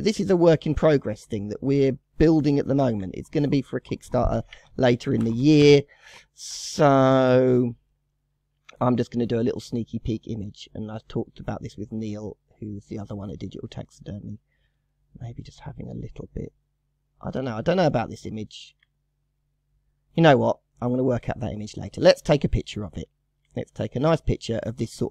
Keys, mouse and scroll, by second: 0.0 scroll down 1, 0.1 scroll up 1, 0.3-0.8 shift+middle drag, 0.8-1.5 scroll up 3, 1.5-1.9 scroll down 1, 1.9-5.0 shift+middle drag, 7.1-7.5 scroll up 4, 7.5-10.0 middle drag, 10.0-10.6 scroll up 2, 10.6-13.7 middle drag, 14.4-14.9 scroll up 1, 14.9-18.0 shift+middle drag, 19.7 scroll down 6, 20.4 scroll down 1, 20.7-22.0 middle drag, 22.0-22.3 scroll down 2, 22.3-22.7 middle drag, 22.7 scroll up 1, 22.8-25.1 shift+middle drag.